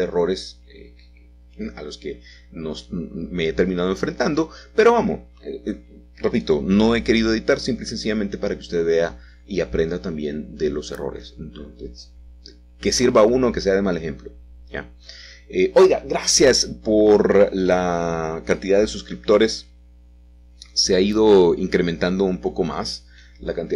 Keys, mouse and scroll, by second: 0.0-1.0 drag, 0.6 g, 1.1 z, 2.2 click, 3.5 ctrl+r, 4.1 click, 4.5 click, 5.1 s, 6.9 click, 7.9 q, 8.0 q, 8.6 Escape, 8.7 Escape, 9.4 a, 9.5 a, 11.3-12.7 alt+shift+drag, 13.9 e, 14.5 s, 15.6 click, 16.2 e, 18.1-19.2 drag, 19.3 e, 20.5 typing, 22.6 click, 23.1 click, 23.1-23.6 typing.